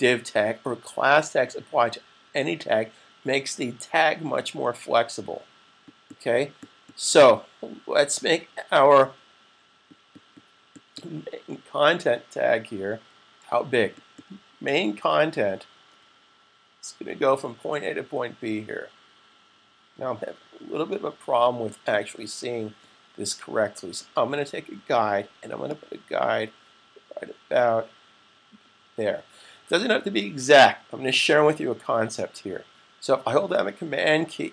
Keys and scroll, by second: 12.8 super+-, 15.6 super+=, 20.5 super+-, 31.2 super+=.